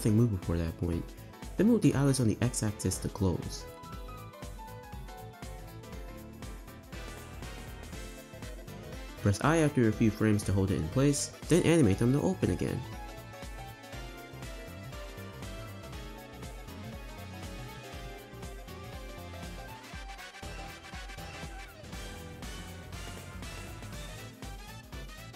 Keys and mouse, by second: 0.6 shift+middle drag, 2.0 Right, 2.1 Right, 2.3 Right, 3.4 r, 4.3 Right, 4.6 r, 7.5 space, 7.6 space, 8.6 click, 8.9 space, 9.0 space, 10.0 i, 11.8 click, 12.2 g, 13.7 click, 14.3 click, 14.5 shift+d, 15.8 click, 16.0 space, 16.6 space, 17.1 click, 17.4 space, 17.8 space, 18.5-19.4 drag, 20.3 r, 21.5 Right, 21.6 Right, 21.7 Right, 21.7 Right, 22.1 r, 24.5 click, 25.1 space.